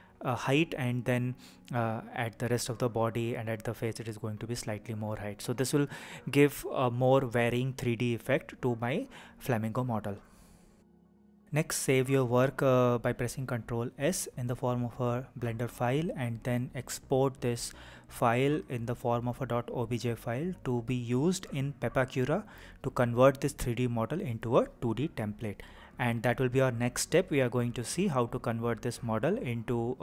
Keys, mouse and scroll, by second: 0.0 shift+click, 0.7 middle click, 1.2 KP_3, 1.6 g, 1.7 y, 2.8 click, 3.0 middle click, 3.7 click, 4.1 shift+click, 4.4 click, 4.6 click, 4.8 shift+click, 5.0 shift+click, 5.2 shift+click, 5.4 shift+click, 5.9 KP_3, 6.3 g, 7.2 click, 7.3 middle click, 8.2-8.9 scroll down 5, 9.5 ctrl+s, 19.0-21.0 drag, 21.6 click.